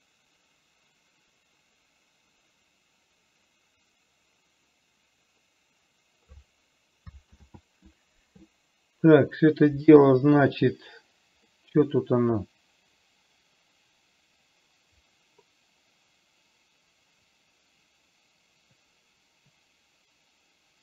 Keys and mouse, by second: 7.6 ctrl+z, 10.4 KP_3, 11.9-20.8 middle drag.